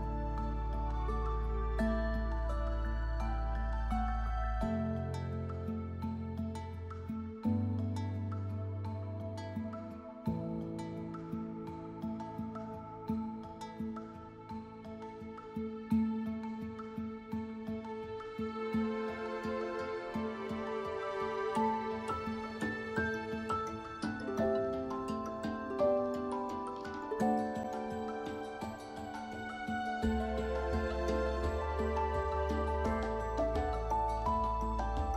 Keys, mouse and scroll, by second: 0.0 scroll up 1, 6.5-7.7 scroll down 1, 7.7 scroll down 1, 7.9 scroll up 1, 9.5 scroll down 1, 10.4 scroll up 1, 13.2 right click, 13.5 scroll down 1, 14.4 scroll up 1, 21.4 scroll down 1, 22.4 scroll up 1, 24.5 scroll down 1, 25.2 scroll up 1, 26.5-34.6 scroll down 1, 34.6 scroll down 1.